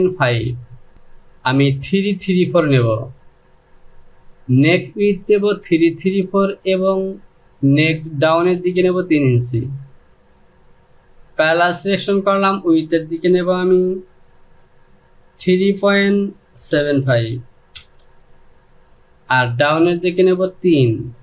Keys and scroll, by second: 15.1 KP_3, 15.4 KP_Decimal, 16.4 KP_7, 16.7 KP_5, 17.4 Return, 20.6 Down.